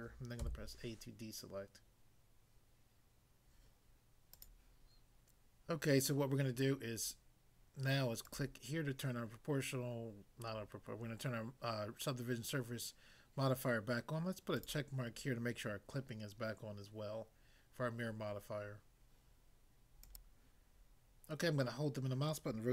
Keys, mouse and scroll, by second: 0.4 a, 4.4 click, 8.3 click, 14.6 click, 20.1 click, 20.2 click, 21.4 middle click, 22.3 middle click.